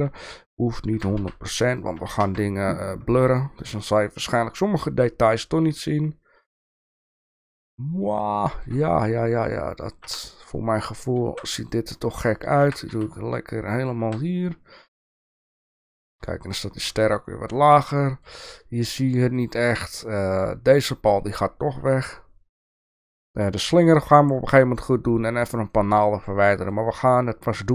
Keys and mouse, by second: 0.1 Tab, 0.9 g, 2.2 Tab, 3.8-8.7 shift+middle drag, 10.0 Tab, 11.2 alt+a, 11.6 click, 12.6 g, 14.0 Tab, 14.9 Tab, 15.4 Tab, 16.3-16.6 shift+middle drag, 17.0-17.6 shift+middle drag, 18.0 shift+middle drag, 19.1-20.4 middle drag, 20.8 click, 22.0-23.1 shift+middle drag, 23.9 shift+middle click, 25.5-26.7 shift+middle drag.